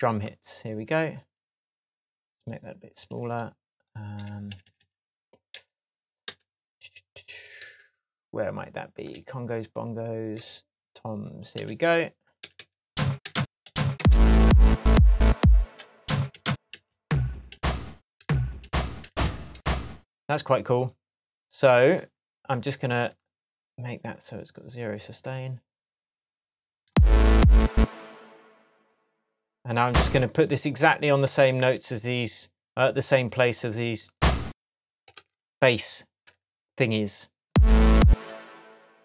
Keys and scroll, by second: 4.1 Up, 7.5 Left, 9.1 Right, 10.3 Left, 11.5 Right, 15.6 space, 26.8 space, 35.1 shift+Tab, 37.4 space.